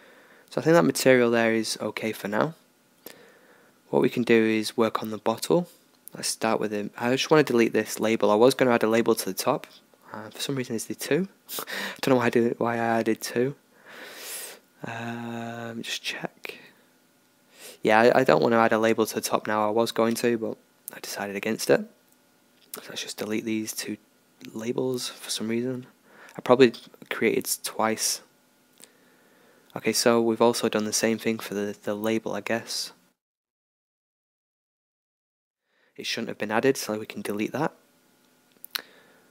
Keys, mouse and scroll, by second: 0.8 ctrl+s, 1.9 middle click, 2.5-5.9 middle drag, 5.9-7.7 drag, 7.4 x, 9.9 middle click, 11.4 middle click, 15.0 ctrl+z, 18.3 g, 20.8 x, 23.1 g, 24.5 x, 26.0-27.7 drag, 26.9 ctrl+s, 28.9-30.4 drag, 30.4 right click, 30.6 g, 36.6-38.4 right drag, 37.6 h, 38.7-39.3 right drag.